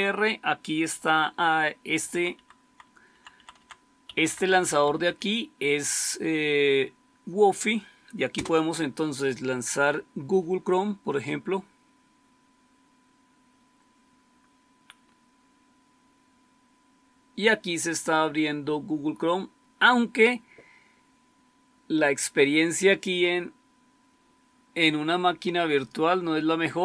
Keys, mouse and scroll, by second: 1.9 Down, 2.2 Down, 2.5 Down, 3.0 Down, 3.2 Down, 3.5 Down, 3.9 Up, 4.2 Up, 4.3 Up, 4.5 Up, 4.7 Up, 8.2 Return, 25.7-26.2 scroll down 1.